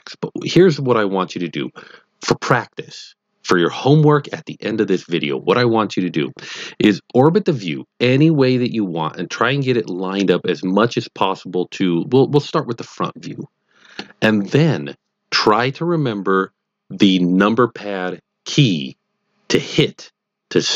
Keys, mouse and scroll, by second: 7.3-10.5 middle drag, 11.8-14.3 middle drag.